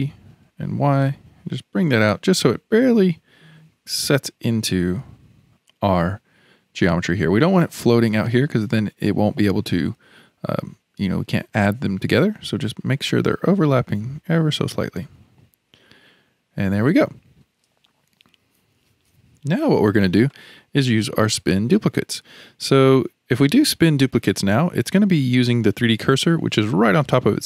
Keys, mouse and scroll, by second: 15.7-17.1 middle drag, 17.1-20.3 scroll down 2, 20.9-24.3 middle drag, 24.3-27.4 scroll up 1.